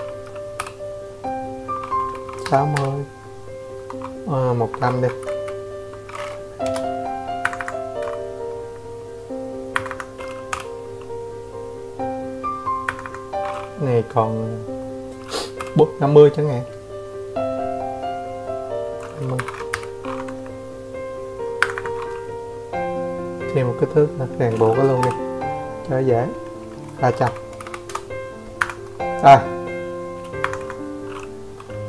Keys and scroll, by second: 0.1 Escape, 1.8 Escape, 1.9 Escape, 2.3-3.9 typing, 4.9 Escape, 5.1 Escape, 7.7 m, 11.4-11.8 typing, 13.7 Escape, 13.8 Escape, 16.9-17.6 typing, 18.6-19.8 typing, 19.9 shift+Return, 20.7 Escape, 22.5 Escape, 24.3-26.5 typing, 27.6 Escape, 29.0 Escape, 29.9 Escape.